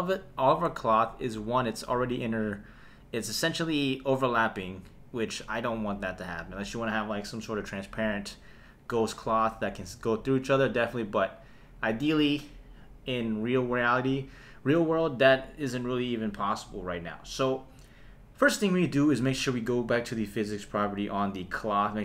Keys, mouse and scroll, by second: 16.1 click.